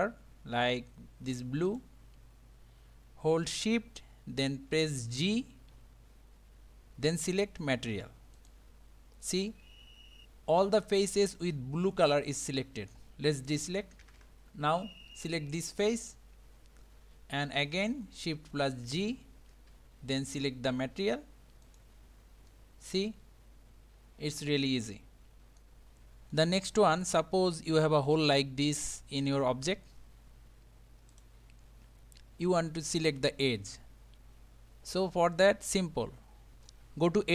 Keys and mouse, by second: 1.7 click, 5.2 shift+g, 9.6-13.0 middle drag, 13.9 a, 14.1 a, 14.2 a, 15.7 click, 18.9 shift+g, 22.5-25.6 middle drag, 26.3 middle click, 28.7 middle click, 31.1 click.